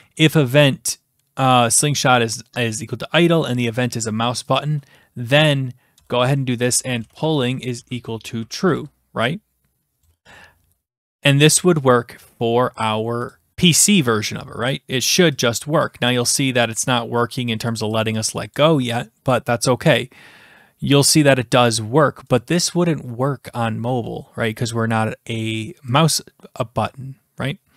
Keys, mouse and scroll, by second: 4.6-5.6 drag, 5.9 Return, 6.4-9.2 typing, 13.4 click, 14.0 click, 15.4 click, 17.7 click, 18.0 click, 18.3 click, 18.6 click, 22.4 click.